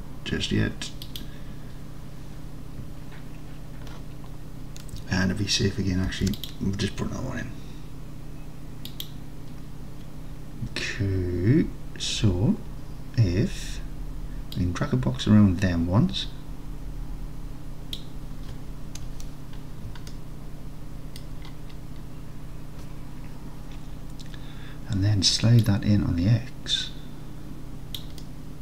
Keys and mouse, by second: 1.1 click, 6.2 ctrl+r, 9.0 click, 14.6-18.0 drag, 20.2-20.6 alt+drag, 20.6 alt+middle click, 25.7-28.0 drag, 28.2 middle click, 28.5 middle click.